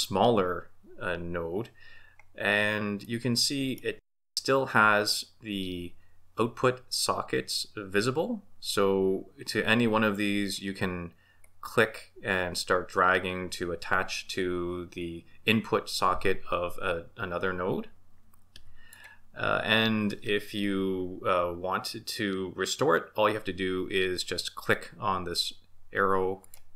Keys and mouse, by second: 3.0-3.8 middle drag, 11.4-18.6 drag, 26.4 click.